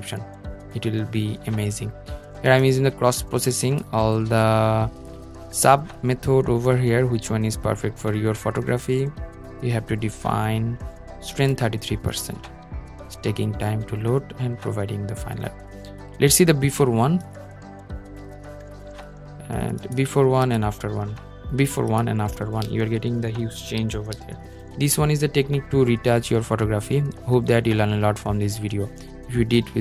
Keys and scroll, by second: 22.7 super+0.